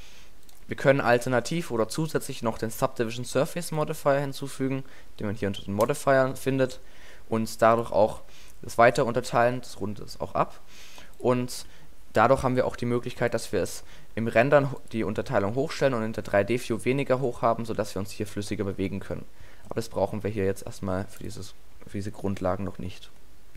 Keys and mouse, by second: 1.1 Tab, 7.8-9.4 drag, 11.2-12.8 drag, 13.2-14.2 drag, 16.6 click, 21.3-22.7 drag.